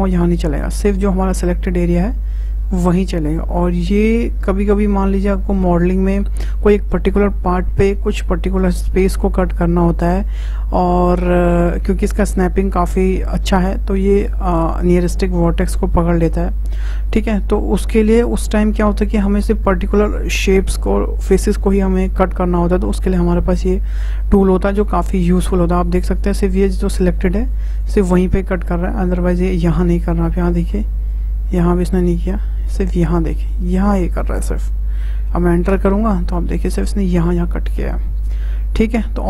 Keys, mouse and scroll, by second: 30.0-34.5 middle drag, 36.2-39.2 middle drag.